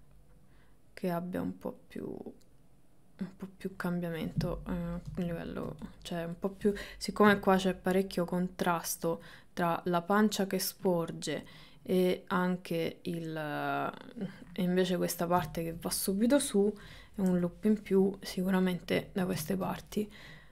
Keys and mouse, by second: 5.3 shift+middle click, 6.0 click, 7.3 g, 11.4-12.7 middle drag, 13.1 click, 14.0 middle click, 15.5 shift+middle click, 15.9 middle click, 16.9 KP_1, 17.3 KP_3, 19.3 middle click.